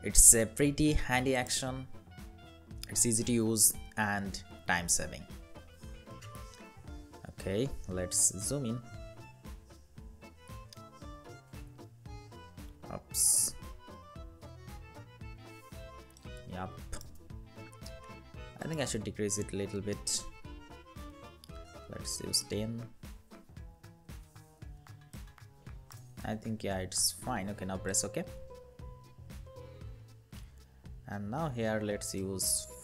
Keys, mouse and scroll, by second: 8.5 =, 8.5 =, 12.9 ctrl+=, 13.2 ctrl+=, 13.7 ctrl+=, 14.2 ctrl+=, 15.4 space, 21.1-22.3 typing, 23.5 ctrl+=, 24.5 space, 26.3 ctrl+-.